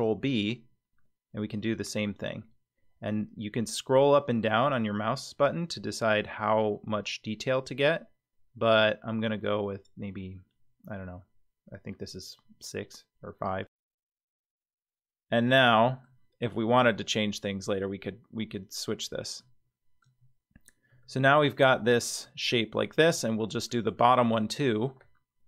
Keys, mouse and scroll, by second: 14.3 middle click, 14.9-15.6 scroll down 4, 15.6 middle click, 19.4 middle click, 20.1-20.9 scroll down 2, 20.9 Tab, 20.9 scroll down 1, 21.4 middle click, 22.5-22.9 middle drag, 23.2 shift+middle click, 23.9 middle drag, 24.5 Tab.